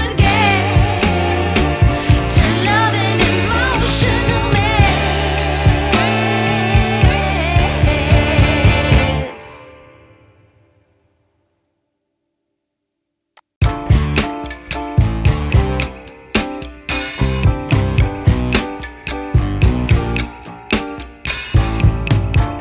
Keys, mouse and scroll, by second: 1.6-2.2 scroll up 1, 2.2 scroll down 1, 3.5 click, 4.7 scroll up 1, 4.8 scroll down 1, 5.1 scroll up 1, 5.8 scroll up 1, 6.0-6.3 scroll down 2, 6.3 scroll up 1, 6.7 scroll down 1, 9.0 click, 10.3 shift+a, 14.5 Tab, 15.4-16.6 typing, 17.7-19.6 typing, 20.9 Tab, 21.9 r.